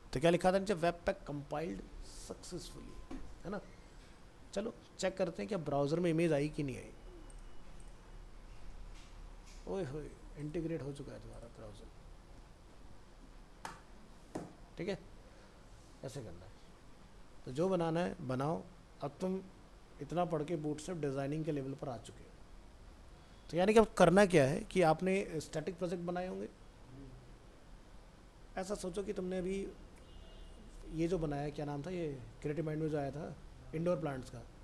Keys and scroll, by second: 5.6 ctrl+s.